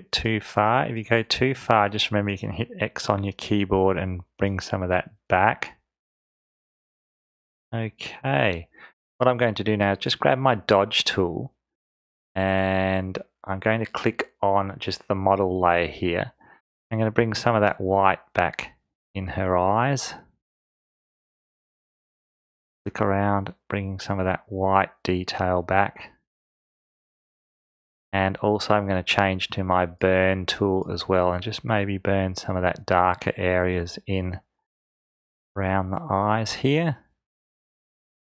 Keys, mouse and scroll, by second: 11.3 click.